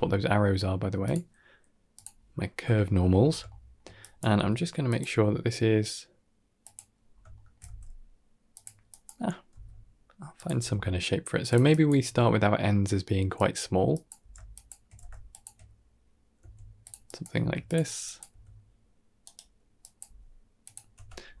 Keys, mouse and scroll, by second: 0.9 click, 2.6 shift+middle click, 3.0-3.3 scroll up 3, 3.3 shift+middle click, 3.8 click, 4.2 r, 4.9 g, 6.9-7.4 scroll down 2, 7.2 shift+middle click, 7.5 g, 8.7 click, 9.4 r, 10.4 g, 11.6 click, 11.9 g, 13.8 click, 14.1 g, 14.8 g, 16.2 s, 16.9 click, 17.2 s, 17.9 click, 18.1 s, 19.3 click, 19.3 s, 19.7 click, 19.9 g, 20.8 Tab, 21.1-21.4 scroll down 2.